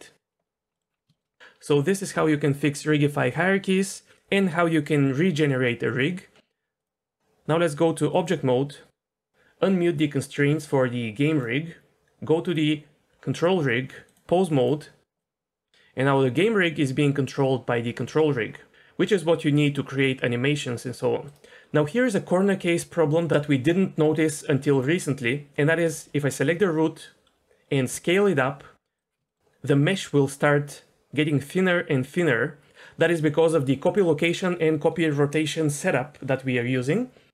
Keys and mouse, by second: 0.7 middle click, 1.1 shift+middle click, 6.8-8.3 drag, 11.3 click, 12.5 click, 14.1-14.7 drag, 15.2 drag, 15.6 r, 18.1 r, 26.0 shift+middle drag, 27.9 s, 29.3 shift+middle click.